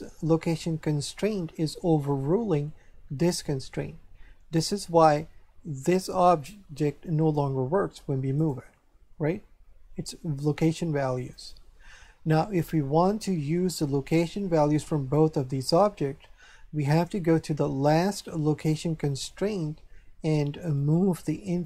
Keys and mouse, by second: 5.8 right click, 8.3 right click, 11.3 right click, 20.8 click.